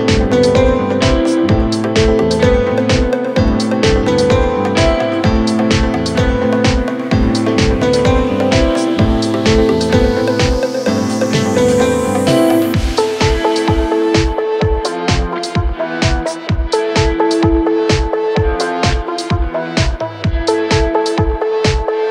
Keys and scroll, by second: 2.9 Escape, 12.1 ctrl+z, 13.1 F3, 14.6 F3, 15.6 Escape, 17.7 shift+F2, 17.9 Escape.